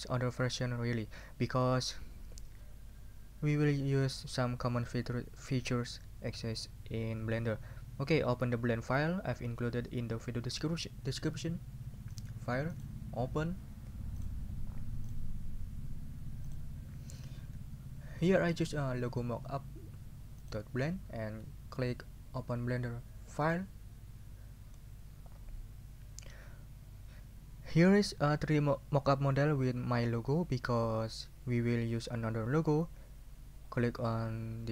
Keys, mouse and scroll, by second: 12.1 click, 12.7 click, 14.2 click, 15.0 click, 16.5 click, 20.4 click, 23.4 click.